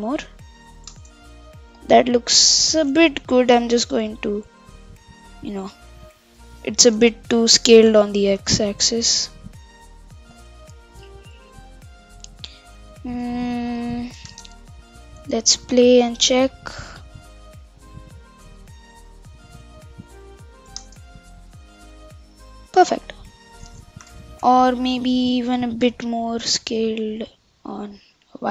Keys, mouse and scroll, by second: 1.0 shift+space, 1.2-3.3 middle drag, 3.3 KP_7, 3.6 Tab, 5.5-5.8 scroll down 5, 5.8 scroll up 3, 6.9 Tab, 8.0 shift+Left, 9.0 s, 11.4 s, 12.3 g, 14.3 shift+space, 15.7-20.9 middle drag, 20.9 shift+space, 21.5-22.9 middle drag, 22.9 scroll down 1, 23.1-24.1 scroll up 1, 24.4 KP_7, 25.5 s.